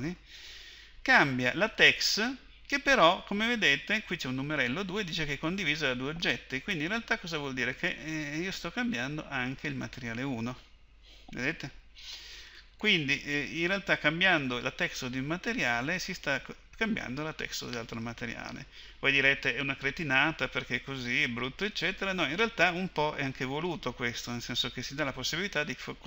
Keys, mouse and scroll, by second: 7.9-24.4 drag.